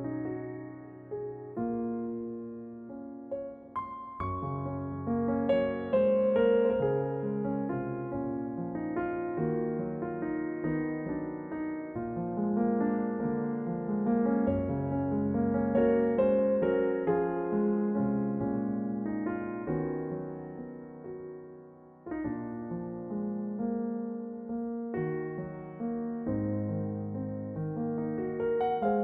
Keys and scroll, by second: 7.0 ctrl+b, 15.0 shift+d, 26.9 ctrl+j.